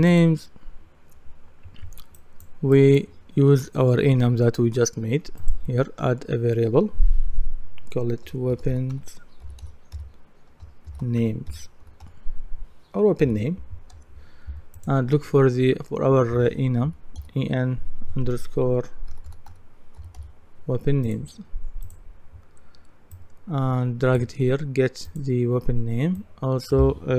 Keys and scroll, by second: 8.3-13.2 typing, 13.9 Return, 16.9 typing, 18.9-20.7 typing.